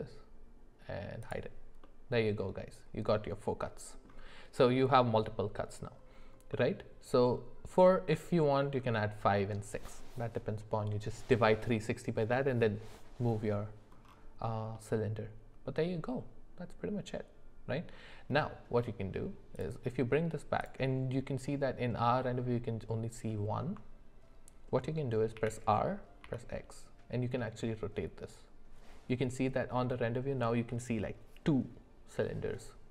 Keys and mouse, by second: 1.2 click, 1.8-4.0 middle drag, 6.5-8.4 middle drag, 14.7-17.8 middle drag, 19.5-23.5 drag, 25.5 r.